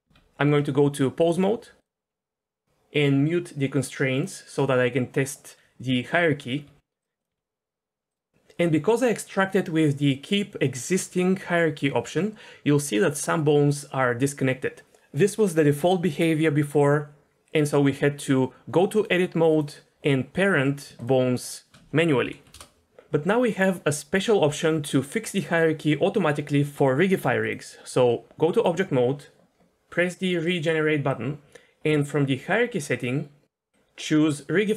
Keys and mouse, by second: 0.0 Tab, 1.3-1.9 drag, 4.2 drag, 5.2 click, 6.6 r, 7.3 r, 11.6 r, 19.0-19.6 drag, 20.0 click, 20.3 click, 21.4 shift+click, 22.2 ctrl+p, 27.5-28.6 drag, 30.5-34.7 drag.